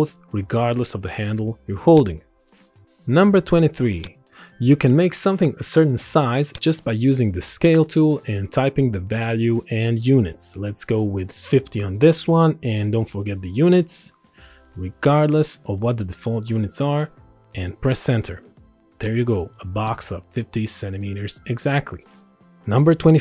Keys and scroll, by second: 10.4 KP_5, 12.3 KP_0, 14.1 c, 15.5 m, 17.7 Return.